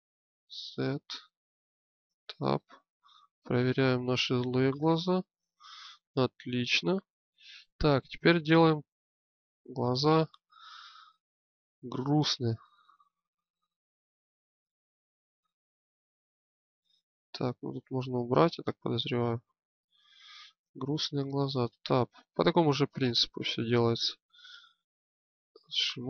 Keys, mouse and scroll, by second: 0.0 z, 1.9 Tab, 4.5 middle click, 7.0 middle click, 7.8-14.7 drag, 14.7-17.6 middle drag, 17.6-21.0 drag, 21.0 Tab.